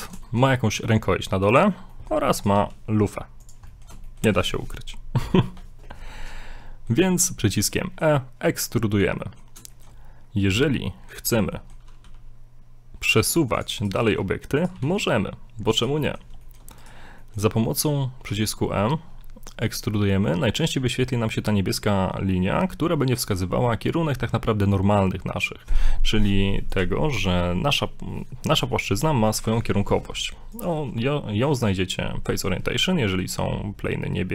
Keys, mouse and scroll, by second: 0.7 shift+middle click, 0.9 e, 1.8 scroll down 3, 2.0 middle click, 2.5 right click, 2.5 right click, 2.6 e, 3.7 middle click, 4.0 shift+middle click, 6.4 middle click, 7.8 middle click, 9.2 middle click, 9.7 shift+middle click, 10.9 middle click, 11.6 middle click, 12.0 g, 13.8 right click, 14.0 g, 14.8 g, 16.0 middle click, 16.5 shift+middle click, 16.8 right click, 17.2 middle click, 18.3 e, 29.3 middle click, 30.5 click, 32.9 scroll up 1, 33.2 middle click.